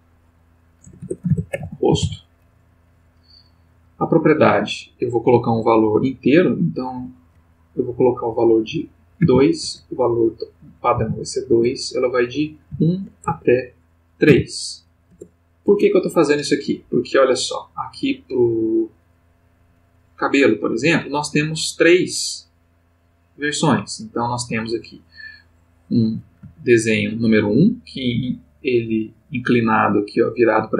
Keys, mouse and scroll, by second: 0.8-2.0 typing, 4.1 Tab, 9.2 2, 9.6 Tab, 10.9 2, 11.5 Tab, 12.7 1, 13.2 Tab, 14.3 3, 15.1 Return, 19.8 click, 21.5-25.1 drag, 26.5 ctrl+middle click.